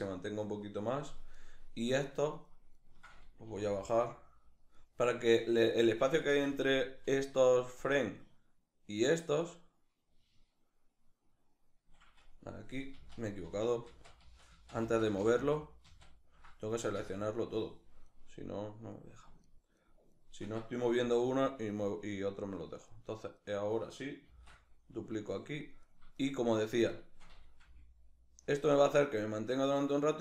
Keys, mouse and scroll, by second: 1.0 right click, 1.6 shift+right click, 3.1 g, 4.4 click, 7.4-17.8 drag, 12.7 ctrl+z, 16.6 a, 17.8 right click, 18.6 right click, 19.1-19.6 shift+right drag, 19.8 shift+right click, 20.6 g, 22.5 click, 23.0 right click, 23.9 shift+d, 25.0 click, 25.4 right click, 25.8 shift+right click, 26.2 shift+right click, 27.2 g, 28.2 click.